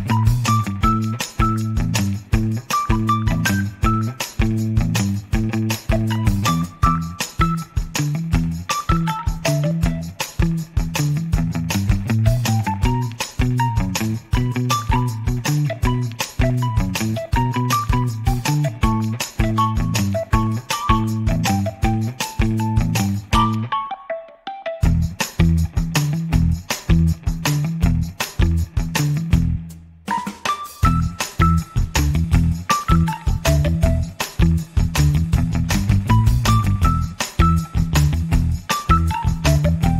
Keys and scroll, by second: 3.5 x.